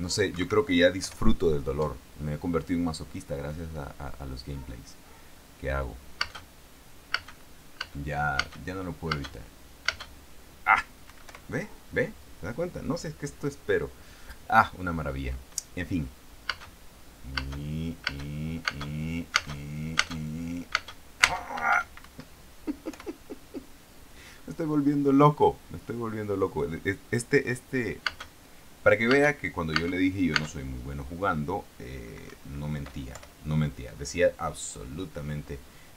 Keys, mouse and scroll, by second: 0.6 Escape, 1.6 p, 6.6 space, 7.4 space, 8.1 space, 9.5 space, 10.2 space, 11.4 Escape, 11.6 p, 16.8 space, 17.7 space, 19.0 space, 19.7 space, 21.1 space, 22.4 Escape, 23.2 p, 28.4 space, 29.5 space, 30.2 space, 32.6 Escape, 33.5 p.